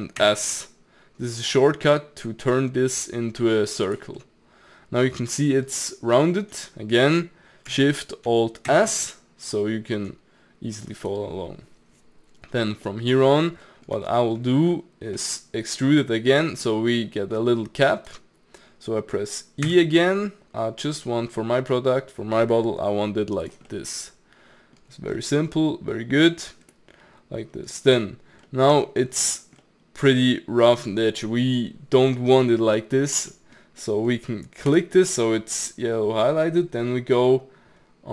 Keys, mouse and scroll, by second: 0.2 alt+shift+s, 4.2-8.7 middle drag, 8.7 alt+shift+s, 12.9 middle click, 13.3-13.7 scroll up 1, 13.7-16.4 middle drag, 16.4 scroll down 2, 16.6 scroll up 1, 16.7 middle click, 17.4 scroll down 1, 17.7-19.7 middle drag, 19.7 e, 23.7-24.9 middle drag, 24.9 scroll down 1, 25.1-26.4 middle drag, 26.4-26.7 scroll down 2, 26.7 middle click, 27.6-28.5 scroll up 1, 28.5 middle click, 28.7 Tab, 29.0 scroll down 2, 29.3 click, 29.6-32.7 middle drag, 33.3 middle click, 33.7 scroll up 2, 33.8-34.7 middle drag, 34.7 click.